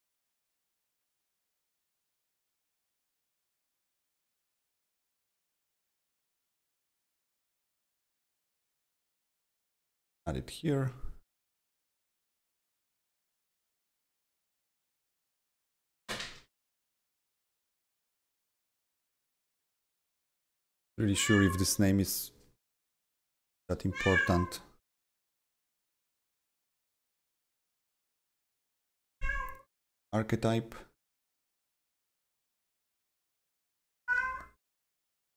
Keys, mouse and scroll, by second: 0.3-3.4 typing, 4.6 right click, 5.5 click, 6.8 click, 8.4 click, 8.5 double click, 9.5-14.8 drag, 13.1-16.5 typing, 17.9 click, 18.0 double click, 19.0 click, 19.6 right click, 19.6 right click, 20.1 click, 28.4-33.0 drag, 33.0-35.3 drag, 34.0 ctrl+c, 34.1 ctrl+c.